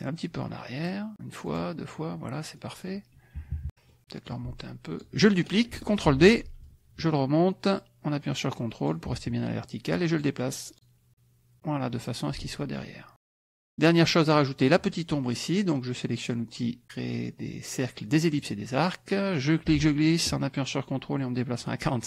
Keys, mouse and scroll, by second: 0.8 click, 1.5 click, 2.5 middle click, 3.3 KP_Subtract, 3.7 middle click, 4.3 ctrl+click, 6.1 ctrl+d, 6.6-9.1 ctrl+drag, 10.1 click, 10.7 click, 11.1 click, 12.4 ctrl+click, 12.9 KP_Subtract, 13.4 click, 18.3 click, 19.4-22.0 ctrl+drag.